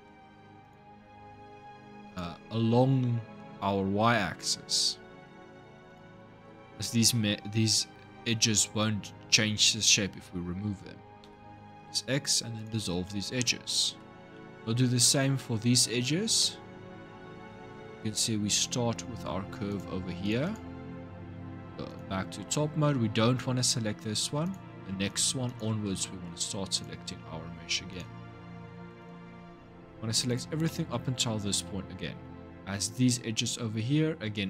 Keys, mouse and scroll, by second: 0.4 alt+shift+click, 1.8 alt+shift+click, 5.7 alt+shift+click, 11.0 x, 13.4-17.3 shift+middle drag, 17.3 scroll up 2, 19.5 click, 20.0 alt+shift+click, 20.2 alt+shift+click, 21.7 click, 24.2 click, 24.9 alt+shift+click, 25.2 alt+shift+click, 25.8 shift+middle click, 26.5 alt+shift+click, 27.7 alt+shift+click, 28.8 alt+shift+click, 30.1 alt+shift+click, 30.4-33.5 shift+middle drag.